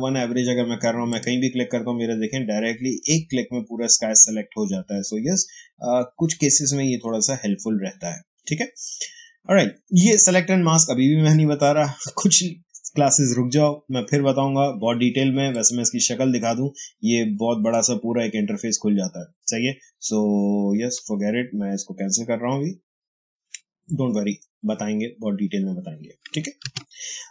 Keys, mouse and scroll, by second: 1.0 click, 15.4 click, 20.6 Escape, 26.5 ctrl+d.